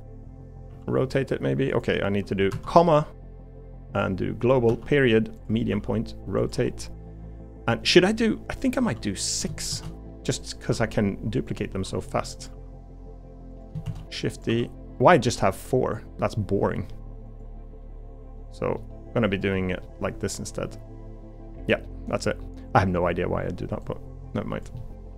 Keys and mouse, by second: 0.7 r, 2.5 ,, 5.7 r, 6.5 g, 8.8 r, 9.8 shift+d, 10.7 r, 11.8 g, 12.5 r, 13.8 shift+d, 14.5 r, 15.3 g, 17.8 middle click, 18.8 middle click, 19.8-21.4 middle drag, 21.7 middle click, 22.0 middle click, 24.8 middle click.